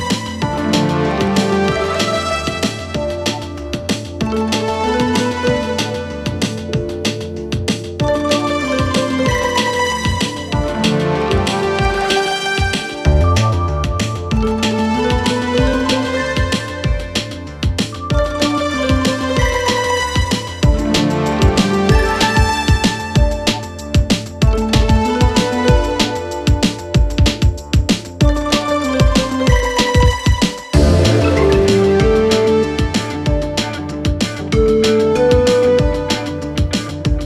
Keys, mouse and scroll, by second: 1.2-1.9 click, 5.3-7.4 click, 8.8-10.1 click, 12.2-13.7 click, 15.1-18.5 click, 20.2-21.4 click, 22.3 click, 23.7-25.5 click, 27.0 Return, 28.3-29.8 click, 31.7 Return, 35.2 click.